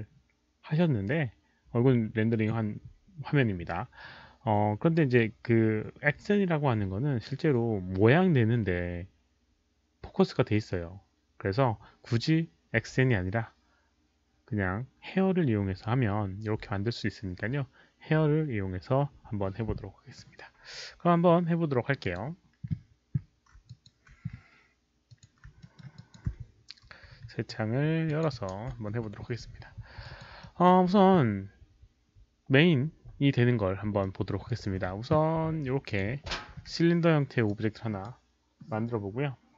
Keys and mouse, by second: 22.1 click, 23.7 alt+click, 25.1 alt+click, 25.6 alt+middle click, 25.9 alt+click, 28.0 alt+click, 28.9 ctrl+n, 28.9 ctrl+b, 28.9 alt+click, 28.9 alt+middle click, 30.1 alt+click, 30.4 alt+middle click, 30.9 ctrl+n, 30.9 ctrl+b, 30.9 alt+click, 33.8 ctrl+n, 33.8 ctrl+b, 33.8 alt+click, 34.0 alt+middle drag, 34.4 alt+click, 35.8 ctrl+n, 35.8 ctrl+b, 35.8 alt+click, 35.8 alt+middle click, 36.5 w, 37.4-38.0 alt+drag.